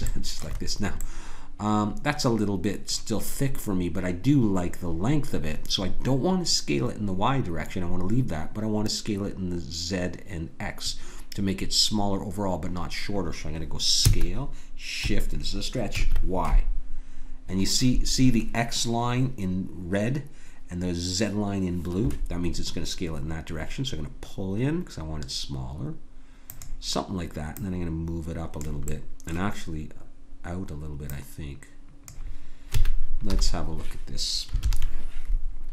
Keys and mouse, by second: 14.0 s, 27.5-33.3 drag, 32.8 a, 33.3 KP_1, 34.6 ctrl+KP_1.